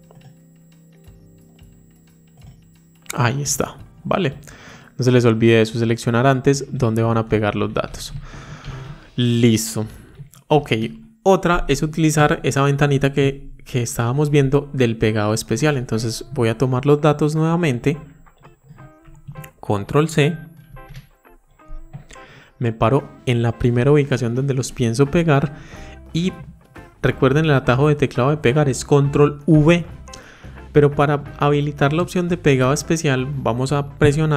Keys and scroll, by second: 6.8 ctrl+shift+Right, 8.4 ctrl+shift+Down, 10.4 ctrl+c, 20.5 ctrl+c.